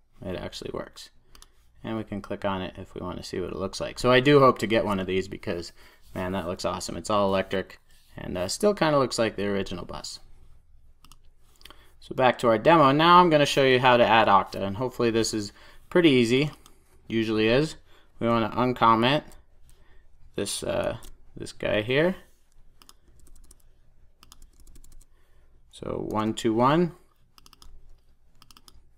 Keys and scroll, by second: 26.0 super+s.